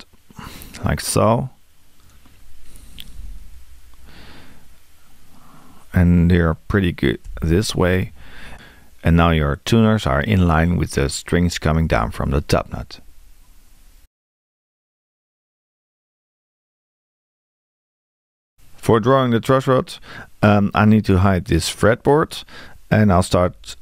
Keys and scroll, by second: 3.1 BackSpace, 7.3 Return, 23.3 r.